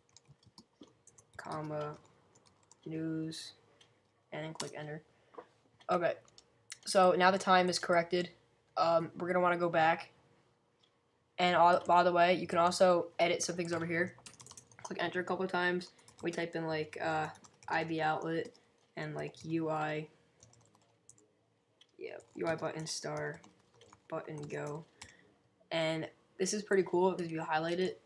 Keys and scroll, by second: 0.0-3.3 typing, 15.8-25.7 typing, 27.0 typing.